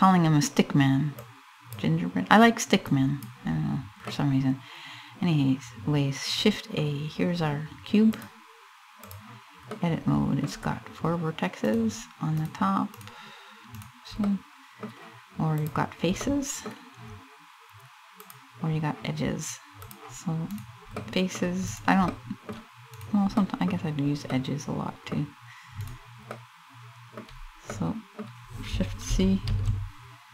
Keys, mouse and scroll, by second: 0.8 click, 2.5 click, 3.2-3.8 scroll down 2, 3.8 middle click, 6.5-7.1 scroll up 1, 9.3 middle click, 11.3 right click, 12.0 right click, 12.6 right click, 13.4 right click, 13.9 middle click, 15.2 click, 15.9 middle click, 17.3 middle click, 17.9 click, 19.5 click, 20.2 right click, 20.6 middle click, 21.3 right click, 21.7 middle click, 22.6 right click, 23.0 middle click, 23.4 scroll up 2, 23.9 middle click, 24.5 middle click, 25.0 scroll up 1, 25.5 right click, 25.9 middle click, 26.9 scroll down 3, 27.3 middle click, 29.1 shift+c, 29.9 scroll down 3.